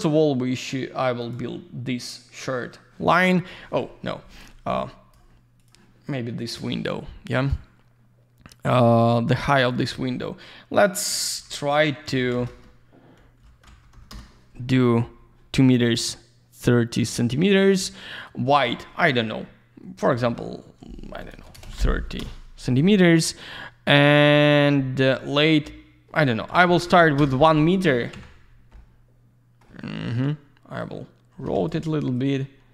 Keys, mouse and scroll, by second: 1.2 click, 3.7 middle click, 4.0 Delete, 4.4 click, 5.6 click, 7.4 click, 9.0 click, 9.5 click, 9.7 click, 9.8 double click, 12.4 Return, 13.2-14.5 typing, 16.6 click, 17.5 click, 17.7 click, 17.8 double click, 21.0-21.7 typing, 22.2 Return, 23.1 Tab, 23.9 click, 24.1 click, 24.2 double click, 27.2 Return, 27.9 middle click, 28.4 z, 28.5 scroll down 1, 28.7 alt+middle click, 30.8 click, 31.4 Escape, 32.1 click.